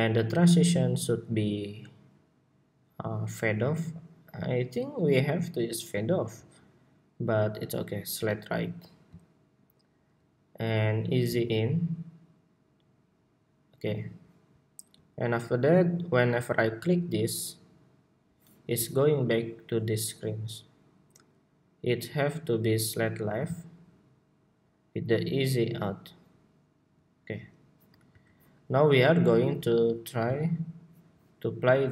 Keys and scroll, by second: 27.8 super+s.